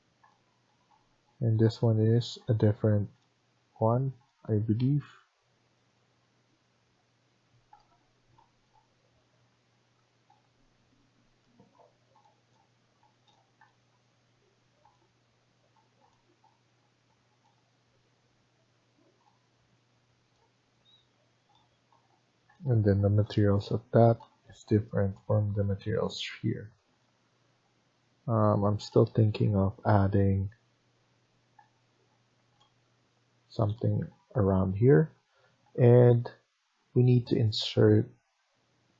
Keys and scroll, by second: 6.9 Escape, 7.1 Escape.